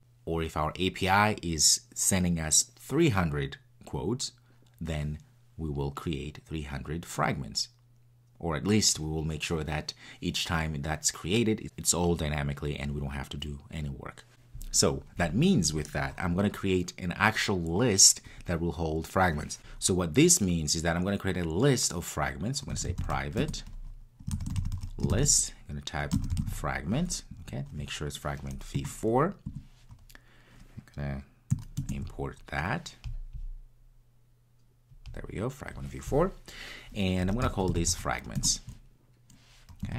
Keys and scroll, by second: 19.6 super+z, 23.4 Return, 28.7 Return, 38.4 Return.